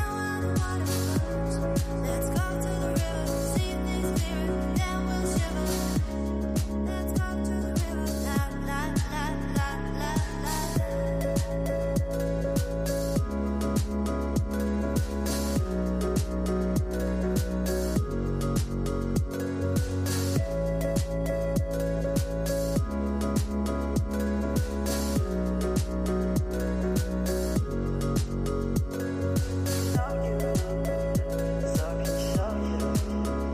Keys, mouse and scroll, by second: 1.9-4.6 right drag, 4.6 click, 8.4 click, 8.8-10.5 right drag, 10.5-11.0 drag, 11.0 space, 18.2 space, 19.9 click, 20.3 space, 20.5 space, 21.3 space, 21.5 space, 22.1-25.9 drag, 27.9 click, 28.8 click, 29.7-30.4 scroll up 11, 30.8-31.8 middle drag, 31.8 click.